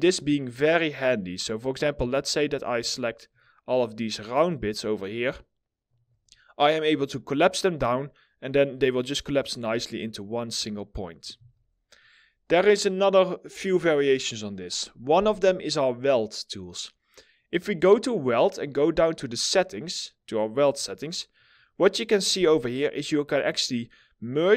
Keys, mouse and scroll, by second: 0.2 middle click, 0.5-1.5 scroll up 1, 1.9 ctrl+click, 7.3 middle click, 10.3 middle click, 10.9 ctrl+z.